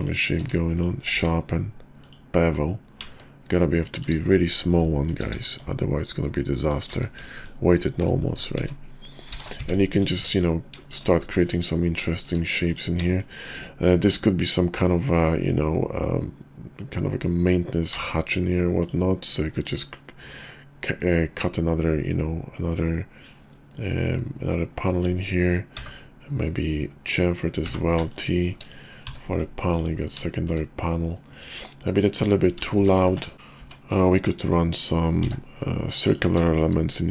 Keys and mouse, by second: 0.3 q, 1.2 q, 5.1 q, 7.2 alt+q, 9.9 KP_5, 10.8 shift+click, 12.1 shift+click, 13.1 shift+middle drag, 17.8 d, 19.6-28.2 drag, 30.3 shift+middle drag, 32.6 ctrl+z, 32.8 ctrl+z, 33.3 shift+click, 33.3 Tab, 33.6 Tab, 35.2 d, 36.4 shift+middle click.